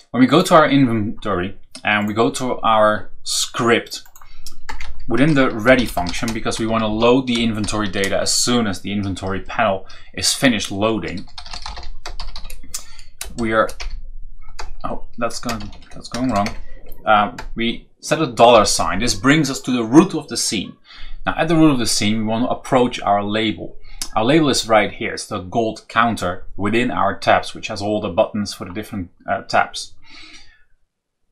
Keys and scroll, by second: 4.6 Return, 4.8 Up, 5.3-6.8 typing, 11.0-13.7 typing, 15.3-16.2 typing, 16.4 shift+Return, 18.5 shift+4.